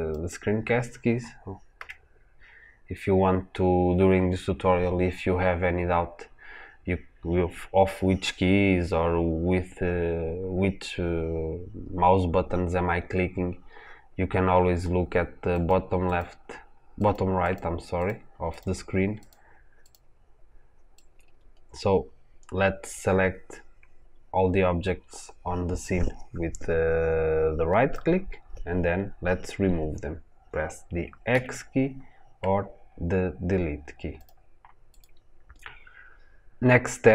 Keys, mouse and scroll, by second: 0.2 click, 1.6 n, 15.4 click, 15.9 click, 16.8 click, 17.3 click, 17.8 click, 18.4 click, 19.1 click, 19.7 click, 20.8 drag, 32.0 x, 34.7 click.